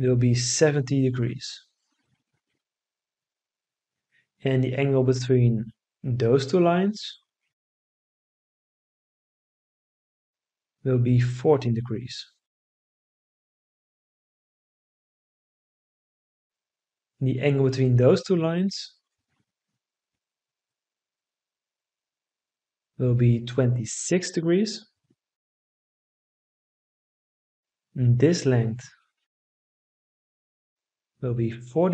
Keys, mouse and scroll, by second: 0.1 7, 0.8 0, 1.5 Return, 10.9 1, 11.4 4, 12.2 Return, 23.4 2, 24.0 6, 24.7 Return, 31.2 4, 31.7 0.